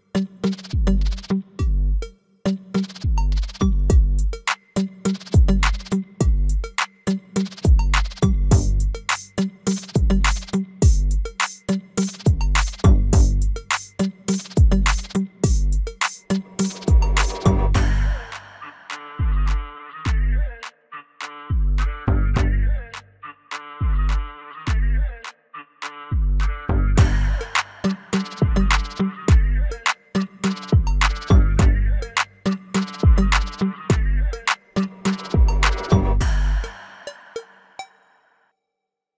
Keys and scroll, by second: 6.9 alt+w, 14.0 alt+w, 18.3 F4, 22.8 alt+w.